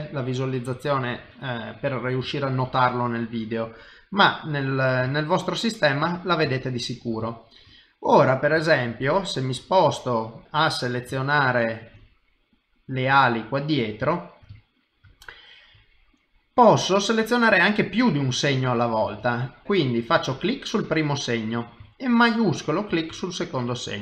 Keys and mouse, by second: 0.7 shift+middle click, 1.4 middle click, 2.3 shift+middle click, 3.3 click, 5.2 shift+click, 6.7 ctrl+middle click, 7.2 shift+middle click, 7.7 middle click, 8.7 shift+middle click, 9.7 middle click, 10.9 middle click, 11.4 shift+middle click, 12.5 click, 13.5 shift+click, 14.1 shift+middle click, 14.6 ctrl+middle click, 15.1 shift+middle click, 15.9 middle click, 16.8 shift+middle click, 17.3 middle click, 18.3 shift+middle click, 19.2 ctrl+middle click.